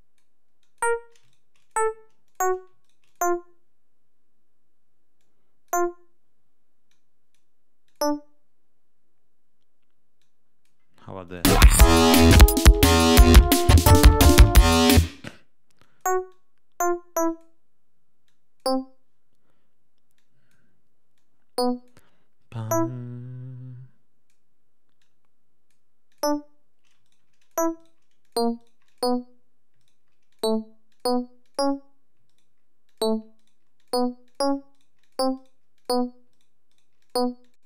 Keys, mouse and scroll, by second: 0.5 click, 1.2 shift+right click, 1.5 shift+click, 2.2 click, 2.7 shift+right click, 3.0 shift+click, 5.1 click, 6.8 click, 7.8 click, 10.1 click, 11.2 click, 11.4 space, 14.9 space, 15.7 click, 16.2-17.5 drag, 18.2 click, 20.1 click, 21.1 click, 22.6-24.4 drag, 24.9 click, 26.0 click, 27.0 shift+right click, 27.3 shift+click, 27.7 shift+right click, 28.1 shift+click, 28.5 shift+right click, 29.7 shift+middle click, 30.2 shift+click, 30.8 click, 31.4 click, 32.2 shift+middle click, 32.8 shift+click, 33.3 shift+right click, 33.7 shift+click, 34.2 shift+click, 34.6 shift+right click, 35.1 shift+click, 35.3 shift+right click, 35.7 shift+click, 36.2 shift+right click, 36.6 shift+right click, 36.9 shift+click, 37.3 shift+click.